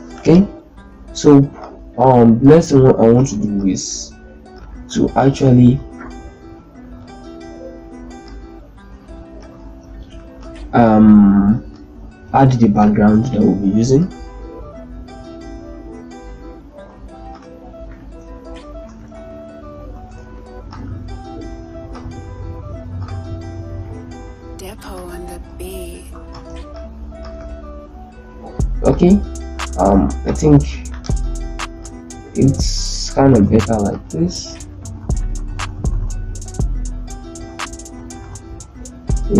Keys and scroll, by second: 3.0 ctrl+space, 4.8 shift+Left, 5.5 shift+Left, 5.7 shift+Left, 6.2 shift+Left, 9.4 shift+c, 12.6 ctrl+g, 18.6 shift+Down, 18.9 shift+Down, 26.1 ctrl+space, 29.6 ctrl+z, 30.5 z, 33.1 ctrl+space, 34.0-35.9 typing, 36.3 shift+Left, 38.2 typing, 38.4 shift+Up.